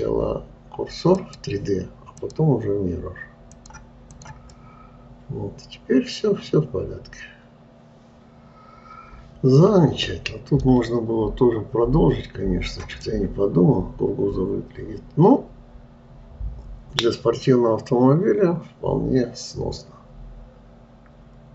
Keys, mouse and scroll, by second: 2.6-4.7 drag, 5.0-8.0 middle drag, 13.5-16.5 middle drag.